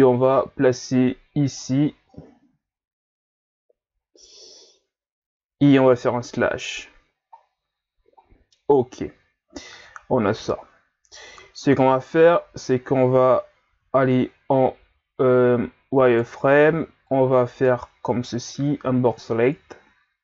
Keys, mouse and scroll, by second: 0.0-2.1 drag, 2.1-3.3 shift+scroll up 3, 3.3 scroll up 3, 4.1-4.8 ctrl+scroll down 3, 6.3 KP_Divide, 7.4-8.2 scroll down 3, 8.2-8.8 scroll down 2, 11.5 scroll down 1, 12.2-12.8 ctrl+scroll up 2, 13.7 z, 16.0 right click, 16.7 b, 18.5-20.2 drag.